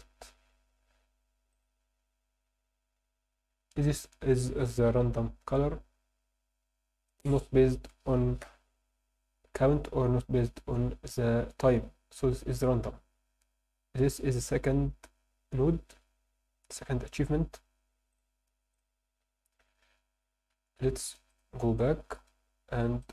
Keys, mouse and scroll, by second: 1.5 click, 18.1 click, 20.5 Escape, 21.3-23.1 drag.